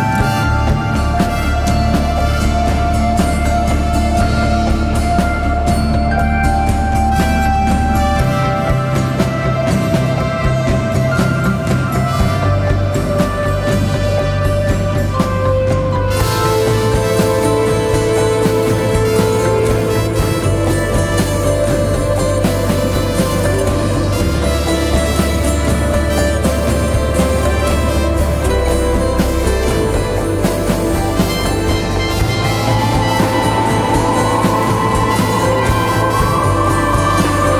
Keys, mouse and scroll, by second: 35.3 typing.